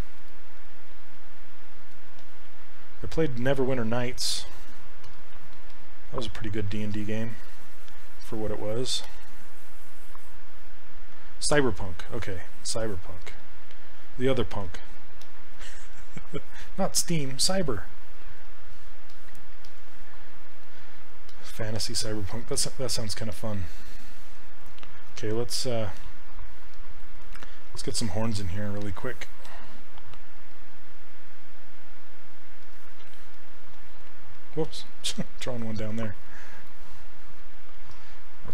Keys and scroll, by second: 5.7 s, 14.7 s.